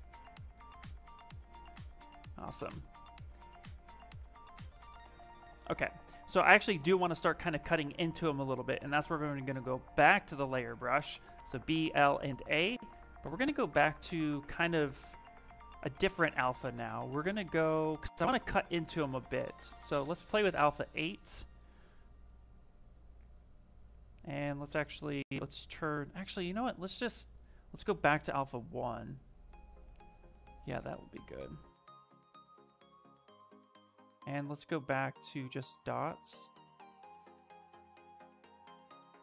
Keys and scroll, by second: 9.2 b, 10.7 l, 11.6 a, 23.6 space, 29.8 space, 32.8 ctrl+z, 33.0 s, 36.0 s, 37.8 shift+f, 38.0 shift+f.